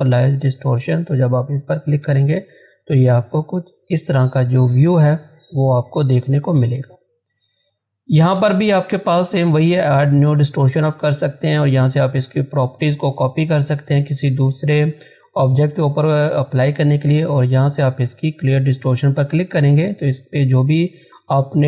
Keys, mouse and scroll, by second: 0.9 click, 2.4-3.0 scroll down 1, 5.1 scroll up 1, 19.4-20.2 scroll down 1.